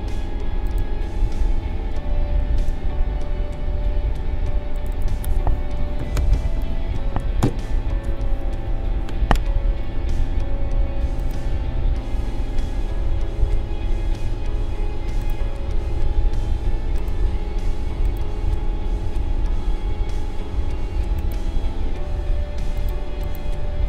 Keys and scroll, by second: 2.4 ctrl+shift+v, 5.5-7.4 typing.